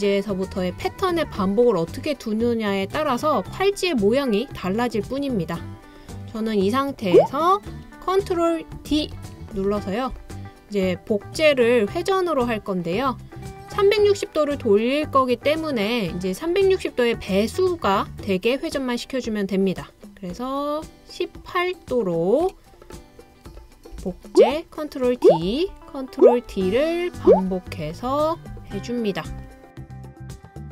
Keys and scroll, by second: 8.9 super+d, 23.9 super+d, 25.5 super+d, 26.5 super+d.